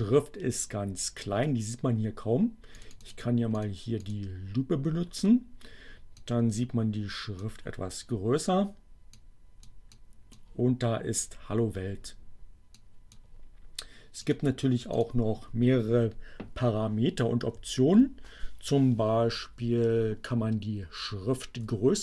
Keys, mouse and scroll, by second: 2.8 click, 3.6 click, 4.0 click, 6.0-7.6 drag, 9.3 click, 10.0 click, 12.4 click, 14.2 click, 15.1 click, 15.8 Up, 18.1 Left.